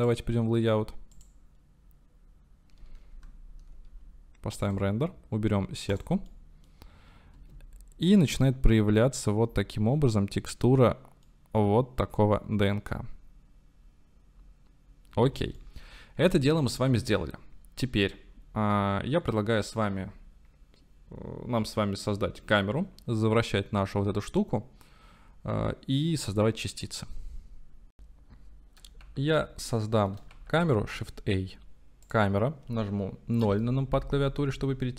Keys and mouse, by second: 0.0 click, 1.1-3.1 drag, 3.1 KP_0, 4.6 click, 5.9 click, 6.3-6.7 drag, 7.4 space, 11.3-12.1 drag, 15.2 space, 15.6-16.3 drag, 16.7 ctrl+s, 29.9 click, 30.4 shift+a, 33.6 KP_0.